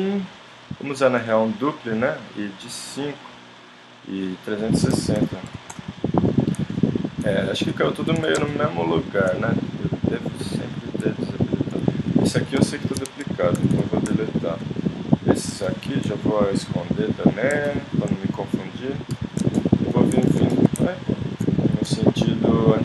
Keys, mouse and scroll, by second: 2.1-5.9 drag, 6.2 middle click, 8.2 z, 10.2 click, 11.5 middle click, 11.7 middle click, 12.0-13.6 middle drag, 12.6 g, 13.6 x, 15.7 click, 16.6 h, 17.3 click, 17.5 middle click, 17.7 click, 19.2 h, 19.3 click, 21.1 ctrl+click, 21.9 h.